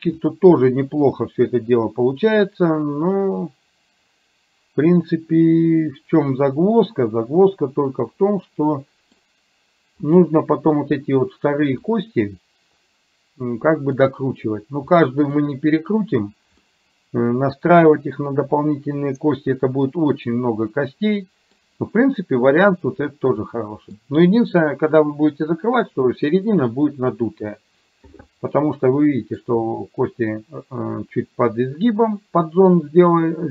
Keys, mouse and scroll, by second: 0.7-10.0 middle drag, 12.0-14.6 middle drag, 15.1-16.4 middle drag, 16.7-21.7 middle drag, 23.6 middle click, 28.6-29.7 middle drag.